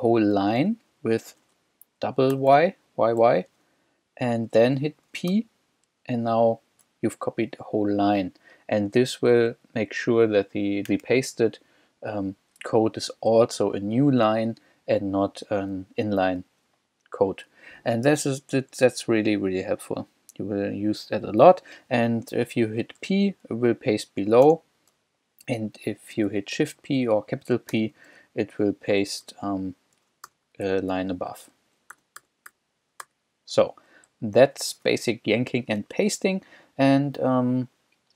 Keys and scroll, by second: 0.0 j, 0.4 k, 2.4 y, 5.3 shift+p, 7.3 k, 9.1 j, 9.5 k, 10.2 j, 15.4 k, 15.9 j, 23.6 j, 24.4 shift+p, 27.7 shift+p, 28.6 shift+j, 29.9 shift+j, 30.3 shift+p, 31.9 u, 34.1 j.